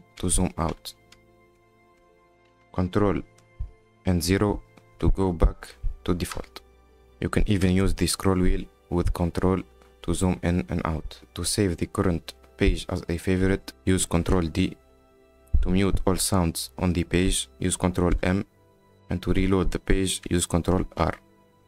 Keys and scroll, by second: 0.7 ctrl+-, 7.0 ctrl+0, 14.7 ctrl+d, 18.6 ctrl+m, 21.4 r.